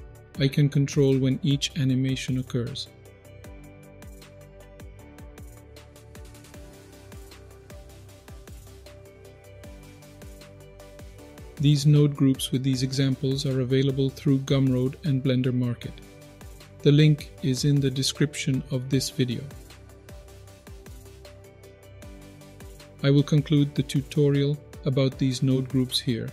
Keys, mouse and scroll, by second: 0.9-4.6 drag, 5.1 click, 5.7-7.4 drag, 7.7 click, 8.3-14.6 drag, 20.9 click, 21.5-23.6 middle drag.